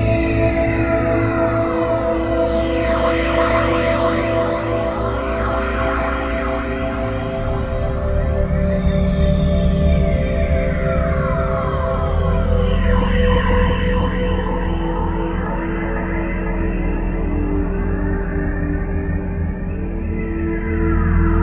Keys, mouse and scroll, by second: 0.4 click, 1.7 click, 2.5 click, 4.6 click, 7.5 click, 11.6 click, 15.3 middle click, 19.4 click.